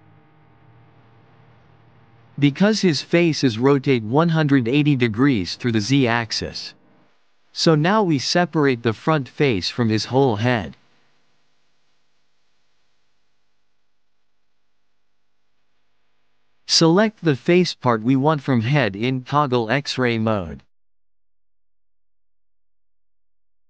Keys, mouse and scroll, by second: 2.5-8.5 middle drag, 8.5 KP_3, 12.3 KP_1, 15.5 Tab, 16.8 click, 17.0 KP_3, 17.8-19.4 drag, 21.2-23.2 middle drag.